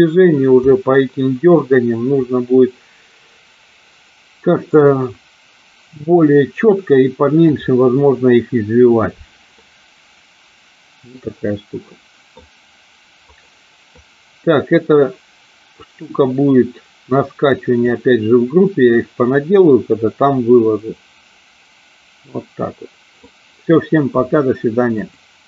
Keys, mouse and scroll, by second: 0.7-1.4 middle drag, 9.7-12.5 middle drag, 13.3 click, 14.0-18.0 drag, 19.1-23.3 middle drag.